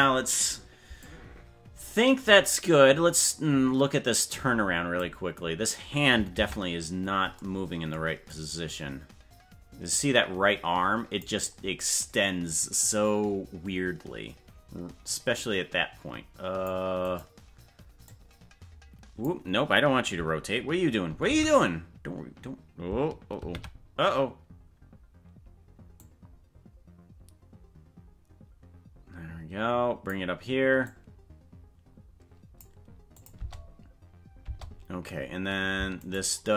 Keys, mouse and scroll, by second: 1.0-5.0 drag, 6.4 ctrl+Tab, 8.3-11.2 drag, 15.4-16.7 drag, 17.2 right click, 18.1-19.3 drag, 21.3 alt+r, 24.0 ctrl+z, 26.0-30.1 drag, 30.9-32.6 drag, 33.2 click, 33.4 space, 34.4 space, 36.2 shift+right click.